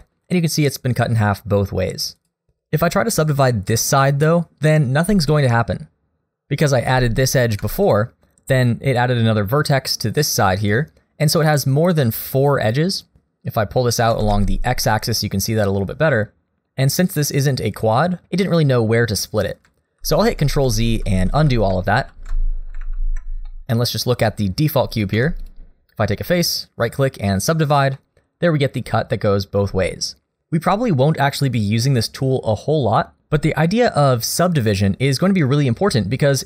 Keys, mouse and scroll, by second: 0.3 scroll up 1, 1.6 middle click, 2.2 click, 2.6 right click, 7.6 2, 7.9 click, 8.6 shift+click, 13.8 middle click, 14.1 g, 20.0 ctrl+z, 20.3 ctrl+z, 20.5 ctrl+z, 20.7 ctrl+z, 21.0 ctrl+z, 21.3 ctrl+z, 21.5 ctrl+z, 21.7 ctrl+z, 22.1 ctrl+z, 22.8 ctrl+z, 23.5 middle click, 25.1 3, 25.4 click, 26.4 right click, 27.9 middle click.